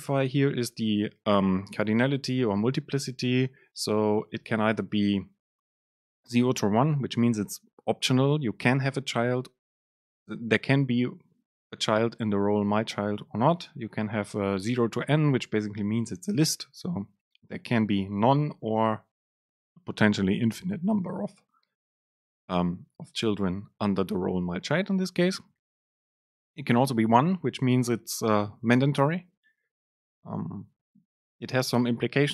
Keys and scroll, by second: 0.4 Left, 2.5 Left, 2.5 super+space.